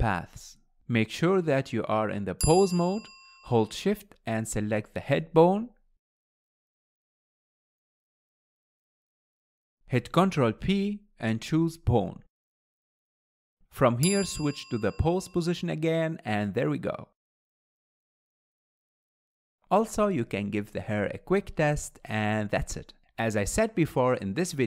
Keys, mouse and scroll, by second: 0.3 shift+click, 7.1 shift+drag, 11.4 ctrl+p, 18.2 click, 19.3 drag, 20.5 r, 22.1 click, 24.1-24.6 middle drag.